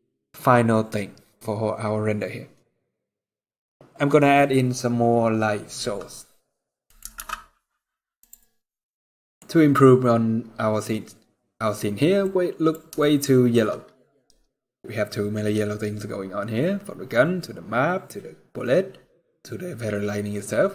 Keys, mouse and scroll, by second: 6.5 middle click, 6.9 shift+s, 8.5 middle click, 9.2-10.6 scroll up 4, 10.6-11.2 scroll down 1, 11.9 click, 12.7 shift+middle click, 13.4 scroll down 1, 14.5 scroll up 1.